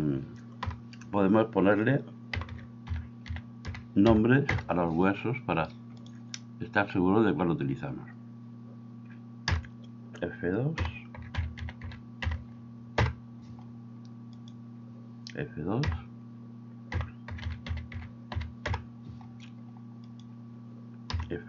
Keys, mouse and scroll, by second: 0.7 F2, 9.5 F2, 15.8 F2, 21.2 F2.